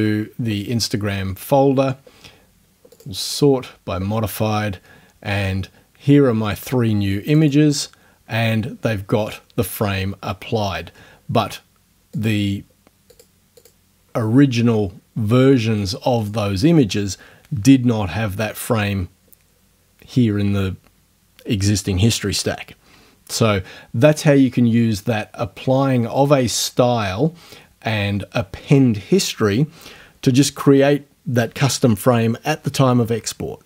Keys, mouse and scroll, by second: 3.0 click, 7.3 click, 12.2 click, 13.1 click, 13.6 click, 15.8 click, 16.2 click.